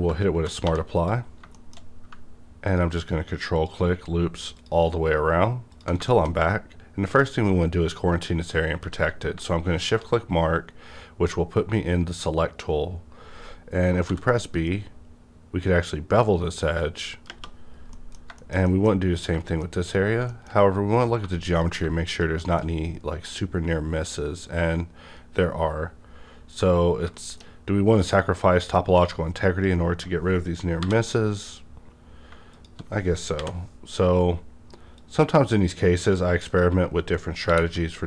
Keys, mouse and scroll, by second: 0.6 2, 0.9 click, 1.0 click, 1.2-1.8 scroll down 2, 1.5-2.6 shift+middle drag, 2.6 click, 3.6 ctrl+click, 6.0 shift+middle click, 6.1 ctrl+click, 6.2 shift+scroll down 1, 6.3-8.1 shift+scroll up 1, 8.1 shift+scroll up 1, 8.7 shift+scroll up 1, 8.7 shift+q, 9.8 click, 14.1 shift+click, 14.1 b, 17.3 b, 17.6-17.9 scroll down 2, 17.9-19.0 middle drag, 19.0 scroll up 1, 19.6 middle click, 19.9 shift+scroll up 1, 20.3 shift+middle click, 20.3 shift+middle click, 21.2 1, 21.5 click, 22.1 click, 22.4 shift+middle click, 22.5 shift+middle click, 22.5 click, 22.6 shift+scroll up 2, 23.6 scroll down 1, 25.2-26.4 scroll up 2, 27.0 shift+scroll down 1, 27.1 shift+middle click, 27.2 shift+middle click, 27.2 shift+scroll down 1, 28.0 click, 28.0 click, 30.8 j, 33.3 m, 35.9 click, 37.5 shift+r.